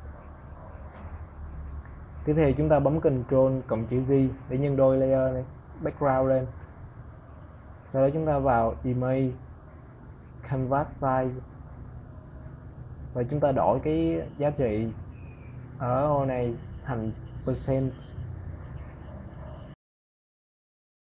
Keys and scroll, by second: 5.2 ctrl+j.